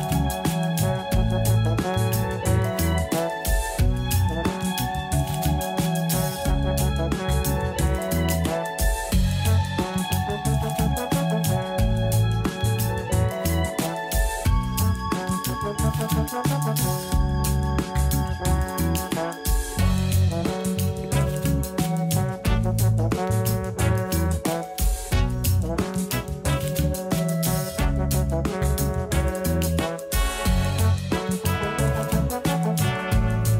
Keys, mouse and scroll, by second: 0.0 1, 0.9 click, 1.5 g, 2.7 a, 2.9 a, 3.5-4.9 middle drag, 4.9 z, 5.3 b, 7.0 m, 8.9 a, 9.1-9.5 scroll down 2, 9.5 z, 10.0-11.8 middle drag, 11.8-12.2 scroll down 4, 12.2 shift+middle click, 13.2 Tab, 13.5-14.4 scroll up 1, 14.4-16.1 shift+middle drag, 17.5-21.8 drag, 22.7-23.4 scroll up 1, 23.4-25.1 middle drag, 25.1-25.5 scroll down 1, 25.5-26.1 shift+middle drag, 26.1-27.4 scroll up 3, 27.4-28.3 middle drag, 28.3-29.4 scroll down 1, 29.4-29.9 scroll down 2, 29.9-31.3 shift+middle drag, 31.3 drag, 32.3 click, 33.2-33.5 drag.